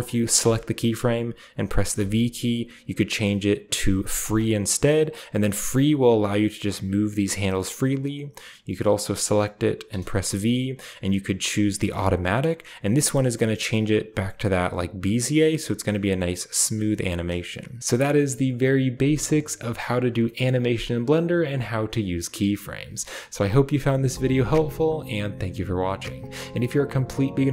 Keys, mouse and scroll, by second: 0.2-1.8 right drag, 1.8 typing, 4.0-5.0 drag, 5.2-7.3 drag, 7.3-9.7 right drag, 9.7 v, 11.7-13.3 drag, 14.2-14.5 right drag, 14.5-16.1 middle drag, 14.5-16.1 scroll down 1, 14.7 g, 16.1 drag, 16.4 drag, 17.4 click, 17.8-21.2 middle drag, 17.8-21.2 scroll down 1.